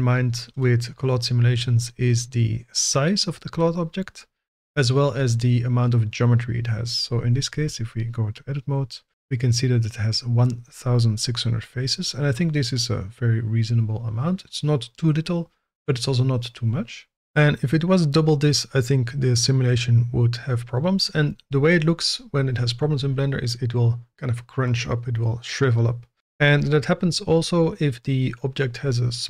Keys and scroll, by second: 7.5 Tab, 17.1 Tab.